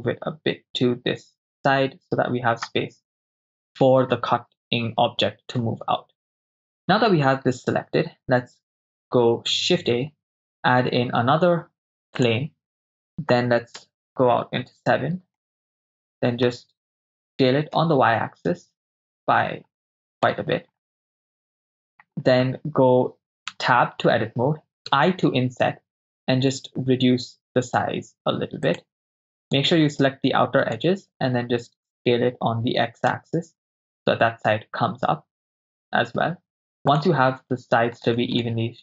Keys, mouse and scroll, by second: 9.6 shift+a, 13.8 KP_0, 14.2 KP_7, 15.5-16.5 ctrl+middle drag, 17.3 s, 17.8 y, 20.2 ctrl+click, 21.0-22.1 middle drag, 23.5 Tab, 24.9 i, 28.7 click, 29.5 right click, 30.6 shift+right click, 32.0 s, 33.1 x, 35.7 click, 38.0 right click, 38.4 shift+click, 38.4 shift+right click.